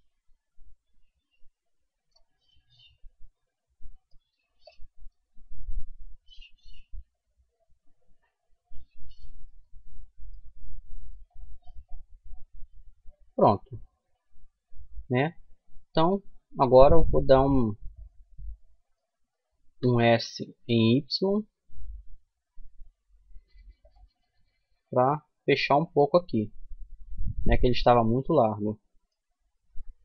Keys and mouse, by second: 1.7 right click, 2.5-6.6 middle drag, 3.5 c, 8.6-10.6 right drag, 10.6 middle click, 13.9 middle click, 15.2-19.1 middle drag, 19.0 s, 23.3-25.3 middle drag, 27.6-30.0 middle drag, 28.9 Tab.